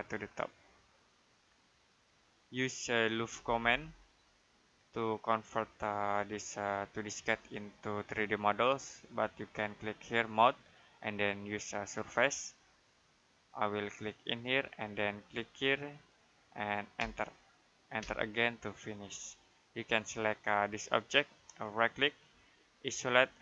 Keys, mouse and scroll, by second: 2.3 middle click, 3.0-4.0 typing, 5.1 click, 10.3 click, 16.8 space, 20.5 click, 21.6 right click, 22.7 click.